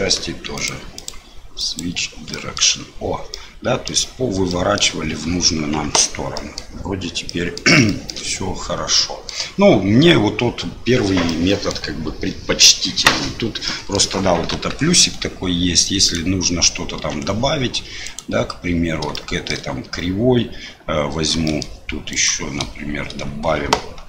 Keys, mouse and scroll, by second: 0.5 click, 1.0 click, 2.3 middle click, 3.3 middle click, 4.5 middle click, 5.9 Tab, 6.3 middle click, 7.2 click, 7.8 shift+click, 8.9 middle click, 11.2 middle click, 13.6 middle click, 14.5 KP_7, 16.0 click, 17.0 Tab, 18.0 click, 19.1 shift+middle click, 21.4 shift+click, 22.1 shift+click.